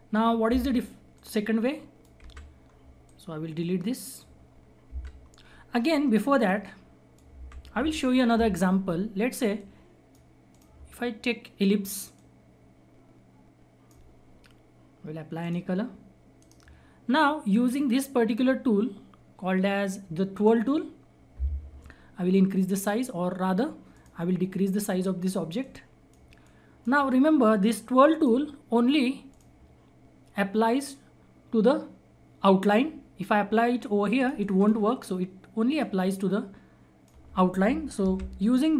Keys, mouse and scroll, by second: 2.1 Delete, 2.6 scroll down 1, 3.0-4.4 drag, 4.4-4.8 scroll up 1, 4.8 Delete, 5.1-5.6 scroll down 1, 5.6 scroll up 1, 6.4 click, 7.2 Delete, 9.5 click, 10.8-11.4 scroll down 1, 11.4-12.1 scroll up 1, 12.4-15.3 drag, 16.3 right click, 17.7-20.3 drag, 23.9 click, 23.9 click, 24.5-25.6 scroll up 1, 25.6-29.2 drag, 29.9-31.4 scroll up 1, 34.1-38.0 drag, 38.0 ctrl+z, 38.5-38.7 scroll down 1.